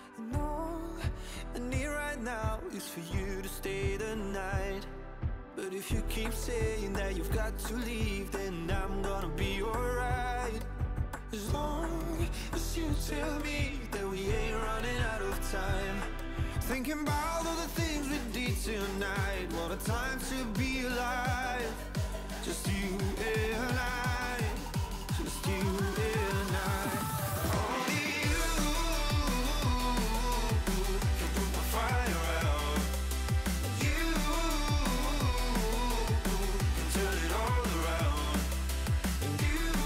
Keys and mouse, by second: 3.0 click, 3.7 shift+click, 4.4 shift+click, 5.3 click, 6.7 ctrl+[, 6.9 ctrl+[, 7.8 ctrl+[, 8.3 ctrl+[, 8.5 ctrl+[, 9.0 ctrl+], 10.4 ctrl+[, 11.8 space, 12.4 click, 15.6 click, 17.9 click, 19.3 shift+click, 19.9 shift+click, 20.4 click, 21.2 shift+click, 22.4 shift+click, 22.9 click, 23.4 click, 24.2 click, 25.7 Return, 28.8 alt+click, 29.6 alt+click, 31.4 click, 31.6 click, 33.3 alt+click, 34.2 ctrl+z, 35.0 ctrl+click, 35.5 ctrl+j, 36.8 ctrl+t, 37.0 click, 37.4 click, 38.9 click.